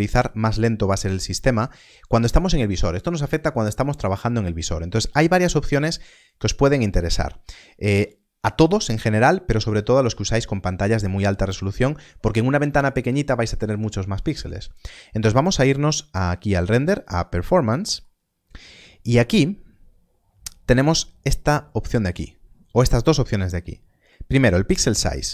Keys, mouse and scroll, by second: 16.9 click, 24.9 middle click.